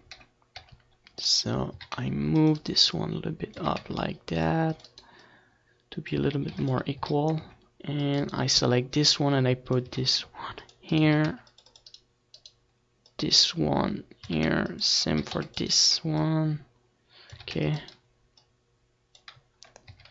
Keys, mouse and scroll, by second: 0.7 c, 1.4-4.8 right drag, 1.8 a, 2.7 c, 3.1-4.4 drag, 3.6 a, 3.9 c, 5.1-7.0 right drag, 5.3-6.7 drag, 6.6 ctrl+s, 7.1 a, 7.4 c, 8.3-10.4 right drag, 8.7-10.1 drag, 9.9 a, 10.4 c, 11.2-14.3 right drag, 11.2 a, 11.3 c, 13.2-14.6 drag, 14.4 c, 14.9-17.3 right drag, 15.1 c, 15.1 a, 16.1-17.3 drag, 17.3 a, 17.6 c, 17.7 click, 17.9 right click, 18.4 click, 19.9 a.